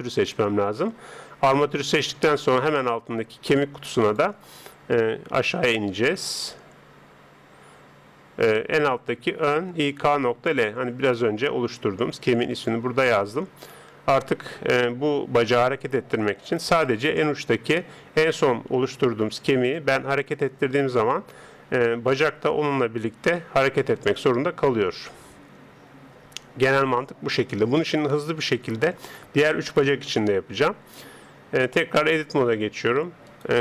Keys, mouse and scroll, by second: 4.0 click, 16.9 right click, 19.3 g, 27.3 scroll up 1, 27.5-31.9 middle drag, 31.9 Tab, 33.3 right click.